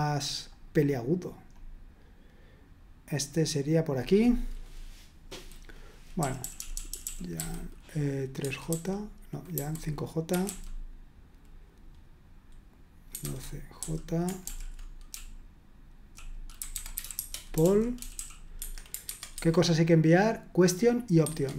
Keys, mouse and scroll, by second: 0.8-2.5 scroll up 1, 3.2 click, 3.8 click, 6.2-10.5 typing, 13.1-18.2 typing, 18.6 Escape, 19.0 super+1, 19.3 super+2, 21.3 super+1.